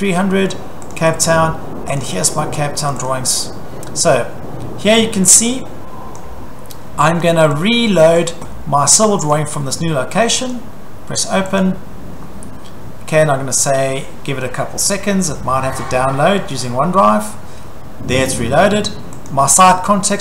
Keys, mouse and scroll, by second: 0.9 click, 1.1 click, 2.0 click, 2.2 click, 2.9 click, 3.1 click, 6.2 click, 8.2 click, 9.3 click, 10.5 click, 11.6 click, 19.3 click.